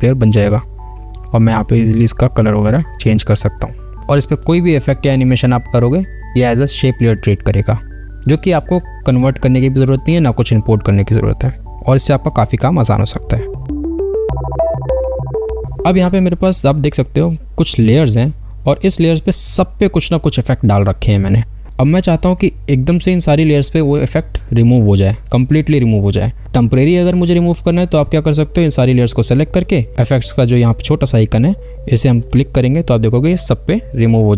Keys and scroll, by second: 0.0 v.